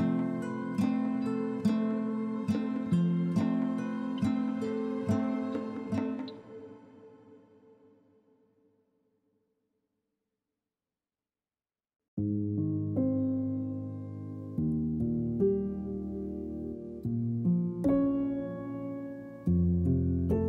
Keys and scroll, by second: 12.7-14.4 typing.